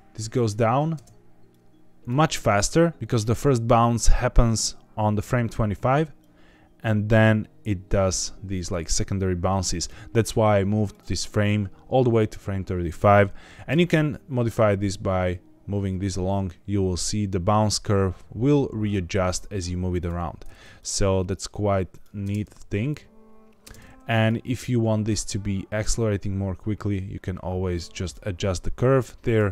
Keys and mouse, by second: 1.4 click, 6.1-9.8 drag, 10.8 click, 13.6 g, 13.8 x, 19.9 click, 20.7-22.0 drag, 22.1 space, 23.6 space, 24.1 click, 25.0-28.0 drag, 28.9 click, 29.4 space.